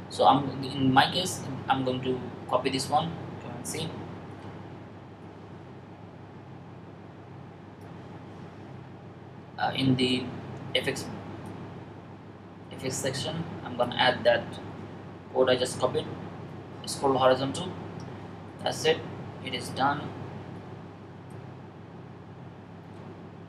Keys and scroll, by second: 3.5 super+c, 14.8 super+v.